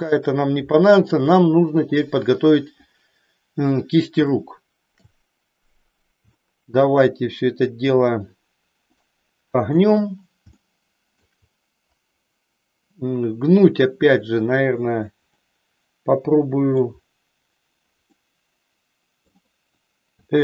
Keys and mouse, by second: 0.7 shift+middle click, 4.3 shift+middle click, 6.4 shift+middle click, 8.9 middle click, 10.6 shift+middle click, 15.4-16.7 middle drag, 18.3-19.4 middle drag, 20.1 r.